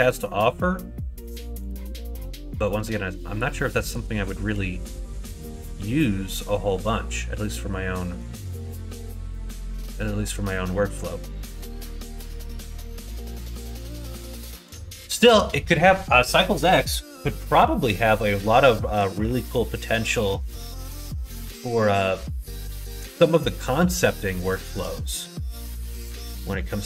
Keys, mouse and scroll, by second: 0.0 middle click, 1.6 shift+click, 3.8 click, 4.8 shift+click, 6.5-8.2 middle drag, 8.4 2, 8.9 click, 9.3 middle click, 10.2 click, 15.1 middle click, 21.0 middle click, 21.8 middle click, 23.1 middle click, 24.4 shift+middle click, 25.0 middle click, 25.5 shift+middle click, 26.1 middle click.